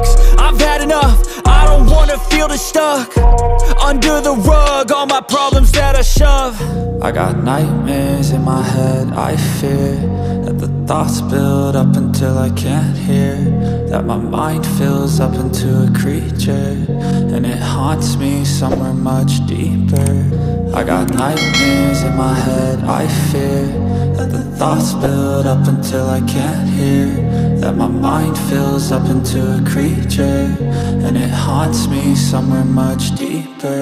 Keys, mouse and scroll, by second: 1.1 alt+click, 4.1 alt+click, 5.3 alt+click, 7.7 click, 17.5 click, 28.1-28.5 scroll up 1, 29.4 click, 31.3 click.